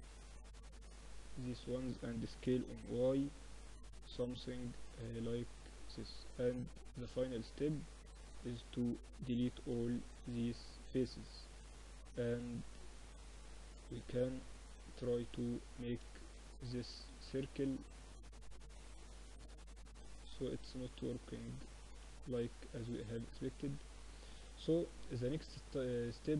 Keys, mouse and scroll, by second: 2.0 s, 6.7-8.3 drag, 7.3-8.3 right drag, 8.3 middle click, 8.6-10.1 drag, 8.9 x, 13.1-18.3 drag, 13.7-15.0 right drag, 16.9 w, 20.1-23.4 middle drag, 21.6 ctrl+z, 22.7 a, 23.4 Tab, 23.6 middle click, 24.9 Tab.